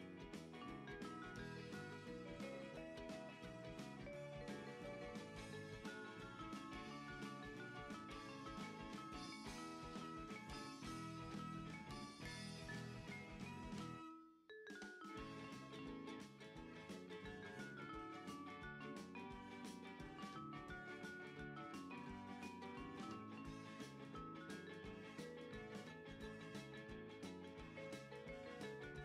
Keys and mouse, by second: 0.5 click, 0.9 Tab, 1.6 middle click, 2.6 right click, 3.0 click, 5.1 click, 6.4 click, 7.2 Tab, 8.2 KP_3, 9.4 g, 11.4 click, 12.1 ctrl+r, 12.6 click, 13.1 right click, 13.7 s, 15.8 click, 16.4 KP_1, 17.3 Tab, 19.0 n, 20.5 n, 21.0 click, 22.8 shift+middle click, 23.5 F6, 26.3 click, 27.1 g.